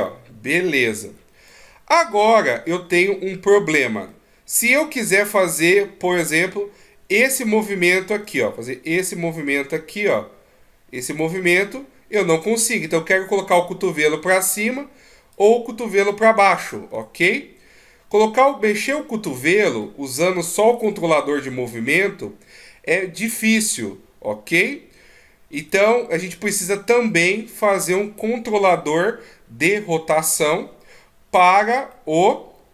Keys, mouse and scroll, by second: 1.8 middle click, 3.1-3.4 scroll up 3, 4.4 middle click, 6.0 middle click, 8.5 d, 11.5-13.6 d, 13.6 click, 14.9 d, 15.7 click, 15.7 d, 17.0 d, 17.4 right click, 19.9 d, 20.1 middle click, 21.1 right click, 21.8 g, 26.5 middle click, 29.9-31.7 scroll down 2, 32.3 middle click.